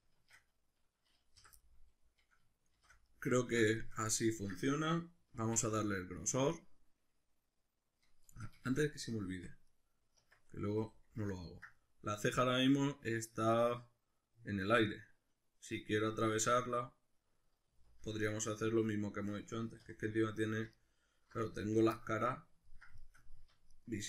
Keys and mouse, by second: 0.1 shift+Tab, 1.4 o, 1.6-9.7 middle drag, 2.8 shift+n, 5.4 alt+e, 8.4 Escape, 9.3 Tab, 9.7 right click, 10.2 Tab, 10.8 a, 11.3-20.8 ctrl+middle drag, 17.7 z, 19.9 3, 20.8 alt+right click, 21.5 z, 22.0-23.7 middle drag, 23.7 alt+shift+right click.